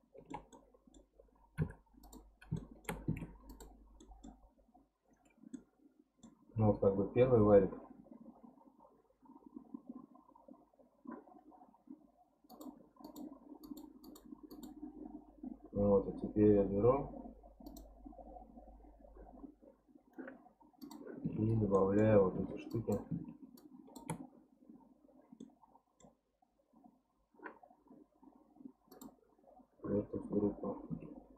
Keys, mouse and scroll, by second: 0.9 scroll up 1, 1.6 p, 2.6 shift+middle click, 3.2 Tab, 3.5 click, 4.0-5.3 middle drag, 5.3 scroll down 2, 5.5-7.5 middle drag, 7.5-8.7 scroll up 1, 8.8-10.5 scroll up 1, 12.5 click, 13.0 click, 13.6 click, 14.0 click, 14.5 click, 17.7 click, 20.8 click, 21.2 Tab, 21.7 middle click, 22.3 1, 22.7 click, 25.4-28.4 middle drag, 28.9-30.9 drag, 30.9 Tab.